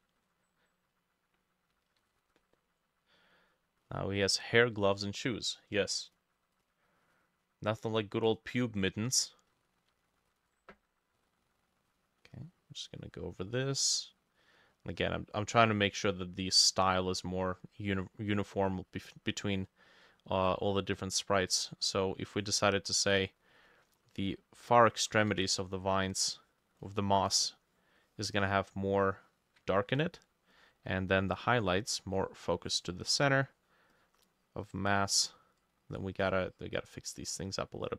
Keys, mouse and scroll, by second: 2.1 ctrl+s, 10.3 ctrl+click, 12.3 double click, 14.7 double click, 16.0 double click, 16.3 double click, 19.1 double click, 24.0 double click, 25.3 ctrl+z, 29.8 ctrl+click, 30.6 double click, 30.9 double click, 31.9 double click, 33.5 double click, 34.0 double click, 34.3 double click, 34.6 double click, 35.0 double click, 37.1 double click.